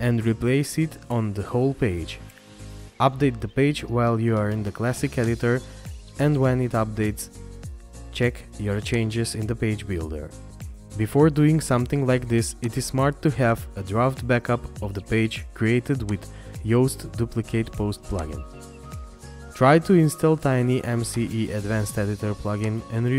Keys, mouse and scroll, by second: 6.9 scroll down 1, 16.6 scroll down 1.